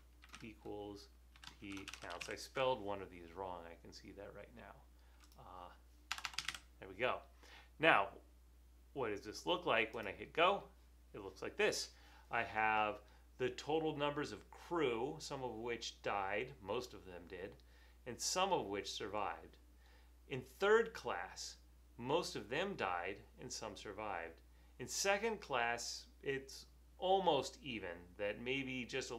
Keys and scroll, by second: 0.0-2.8 typing, 6.2-7.0 typing.